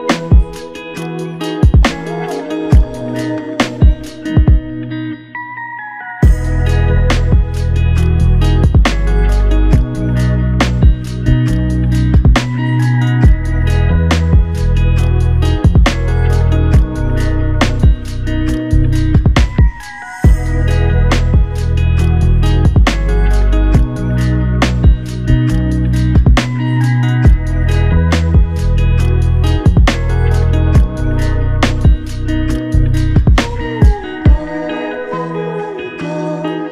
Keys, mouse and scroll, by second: 1.5 f, 22.0 alt+click, 24.3 double click, 31.9 double click.